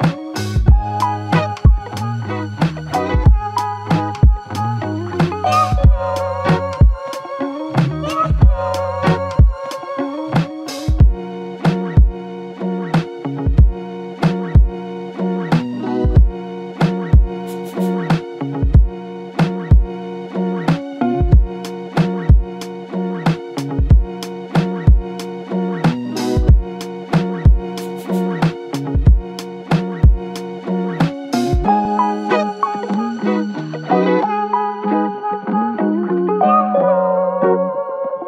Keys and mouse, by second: 0.8 ctrl+click, 4.0 ctrl+click, 9.0 ctrl+click, 10.1 ctrl+click, 12.4 ctrl+click, 26.8 ctrl+click, 28.1 typing, 30.7-31.4 typing, 33.2 double click.